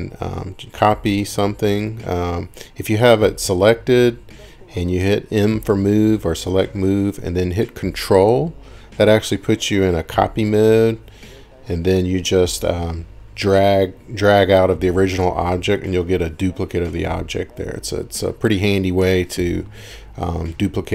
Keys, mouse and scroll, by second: 9.2 ctrl+click, 12.2 ctrl+click, 20.7-20.9 typing.